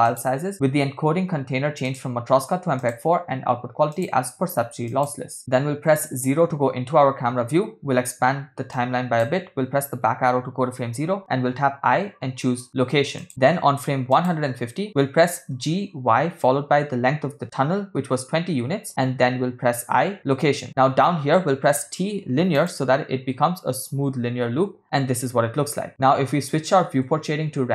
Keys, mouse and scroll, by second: 0.1 click, 1.9-2.9 drag, 3.9-5.1 drag, 6.0 KP_0, 8.7 click, 10.2 Left, 11.7 i, 14.2 click, 15.7 g, 19.9 i, 21.7 t, 23.4 space, 27.0 space.